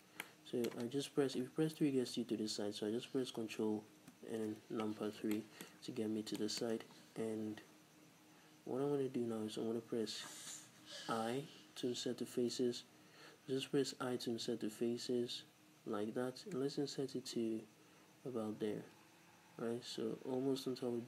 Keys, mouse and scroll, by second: 0.3-4.2 middle drag, 1.4 KP_3, 4.2 ctrl+KP_3, 5.0 z, 5.4 shift+middle click, 5.8 scroll up 1, 6.4 shift+middle click, 6.8-7.2 scroll up 1.